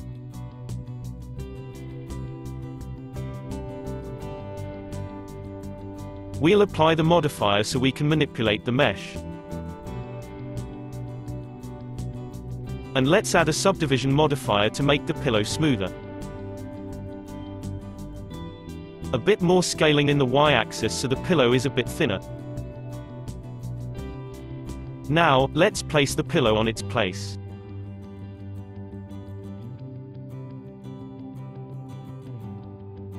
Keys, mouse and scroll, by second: 2.3-3.0 scroll up 3, 3.0-6.1 middle drag, 8.3 click, 9.0 click, 9.5-10.7 middle drag, 10.7 scroll down 1, 11.0-12.2 shift+middle drag, 12.2 click, 12.9-14.6 drag, 14.6-17.3 middle drag, 17.3 s, 20.3-22.7 middle drag, 22.7 scroll down 2, 22.9-24.4 middle drag, 24.4 click, 25.5 click, 26.5 click, 27.5 click, 29.5 ctrl+alt+x, 30.7 ctrl+alt+x, 31.8 ctrl+alt+x, 32.9 click.